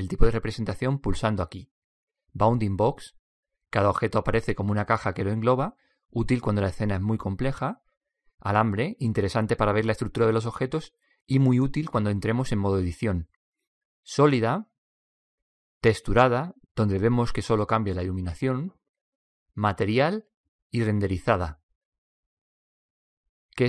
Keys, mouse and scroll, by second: 1.9-3.0 drag, 8.1-9.9 drag, 13.5 click, 14.4 click.